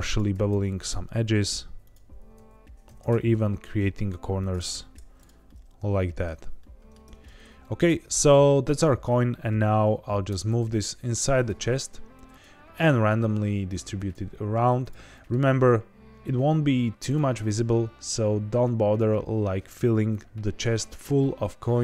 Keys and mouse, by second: 0.1 click, 0.3 g, 0.4 g, 0.7 click, 1.8 click, 2.1 g, 2.3 g, 2.7 ctrl+b, 3.0 v, 4.4 click, 4.7 ctrl+t, 5.1 click, 5.4 middle click, 6.5 middle click, 7.0 Tab, 7.5 middle drag, 10.2-12.7 typing, 11.3 click, 12.2 click, 13.9 click, 14.7 click, 15.1 middle drag, 17.0 click, 17.3 s, 18.8 click.